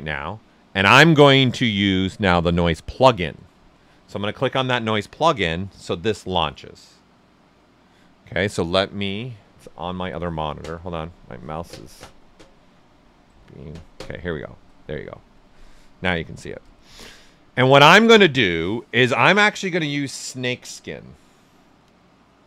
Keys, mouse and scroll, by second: 13.2-17.1 drag, 20.6 click.